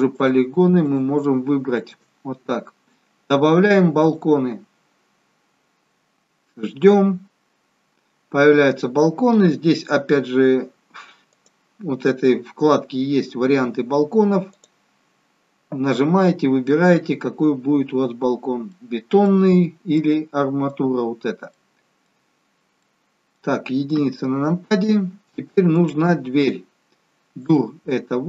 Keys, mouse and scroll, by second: 0.2 shift+click, 1.7 shift+click, 4.0 click, 11.2 click, 18.3 scroll up 2, 18.7 middle click, 19.9 middle click, 22.4-22.8 scroll down 2, 22.8 middle click, 23.9 KP_1, 26.0 click, 27.3 click.